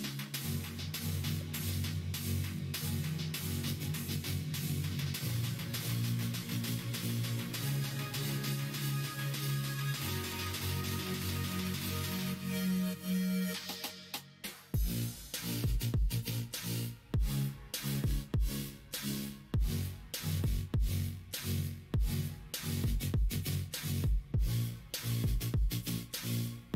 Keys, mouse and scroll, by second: 2.3 k, 9.0 ctrl+z, 9.3 ctrl+z, 10.1 2, 11.2 middle click, 12.4 middle click, 12.8-14.1 middle drag, 15.4 shift+click, 15.8 middle click, 16.4 ctrl+b, 19.2 middle click, 22.5 middle click, 23.0 click, 25.6 3, 25.8 click, 26.6 x.